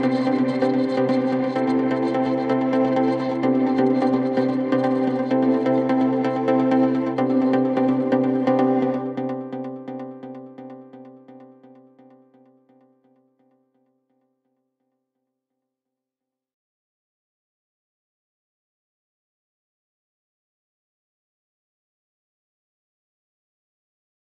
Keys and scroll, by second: 0.4 ctrl+q, 0.8 ctrl+g.